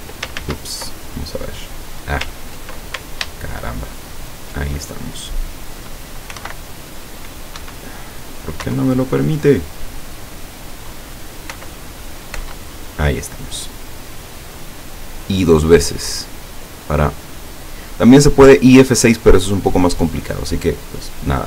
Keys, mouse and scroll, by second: 3.5 alt+shift+right click, 3.9 alt+shift+right click, 6.4 i, 6.5 F6, 7.6 Escape, 8.7 F6, 11.6 i, 12.4 i.